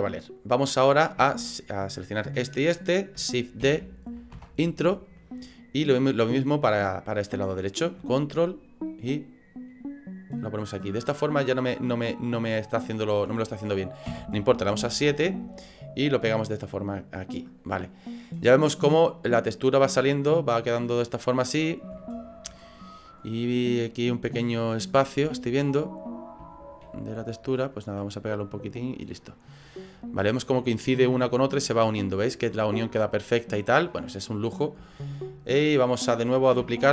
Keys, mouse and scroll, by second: 0.2 middle click, 1.5 shift+right click, 2.3 shift+right click, 3.6 shift+d, 5.6 middle click, 8.8 ctrl+click, 14.1 KP_7, 14.9 shift+middle click, 16.0 click, 17.6 right click, 18.1 right click, 18.3 middle click, 20.8 middle click, 21.2 scroll up 3, 21.9 shift+scroll up 1, 22.0 shift+middle click, 22.6 middle click, 23.2-23.6 scroll up 5, 25.6 right click, 26.5 shift+right click, 26.8 scroll down 2, 28.4 click, 29.4 right click, 30.0 scroll down 3, 31.1 right click, 32.2 scroll down 2, 32.8 middle click, 33.5 scroll down 2, 34.9 shift+right click, 35.9 shift+right click.